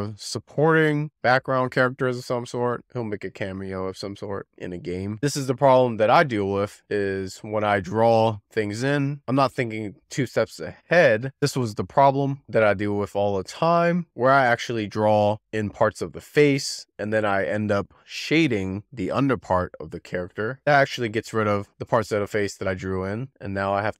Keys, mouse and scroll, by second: 5.7-6.6 scroll up 9, 7.6-8.2 scroll down 4, 9.0 click, 9.4 click, 10.5 click, 12.2 click, 13.6-14.7 drag, 14.7-15.2 scroll down 5, 15.3 click, 16.3-17.5 drag, 17.7 z, 18.4 z, 18.9-20.6 drag, 21.5 scroll up 4, 22.0 shift+middle click, 22.6 scroll up 3, 22.7 scroll down 1.